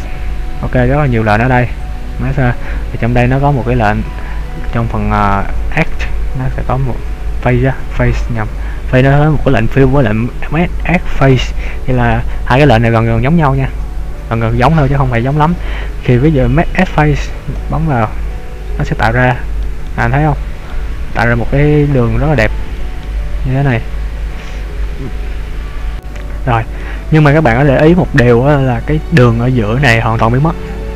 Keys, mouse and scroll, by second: 18.7-19.3 scroll up 2, 19.3 shift+middle click, 19.9 middle click, 22.8 middle click, 23.8 middle click, 25.9 f, 26.9 middle click, 28.6-30.0 scroll up 2, 30.5-30.9 scroll down 3.